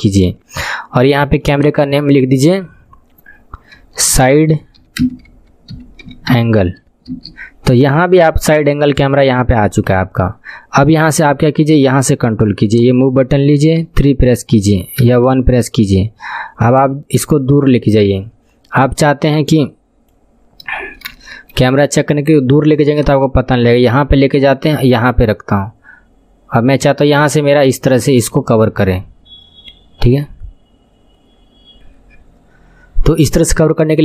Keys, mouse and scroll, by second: 1.4-14.3 drag, 13.8 KP_3, 14.3 scroll down 5, 15.0 KP_1, 15.4-16.1 scroll down 7, 16.7 click, 20.7 scroll down 5, 21.1-23.0 shift+middle drag, 23.0-26.0 drag.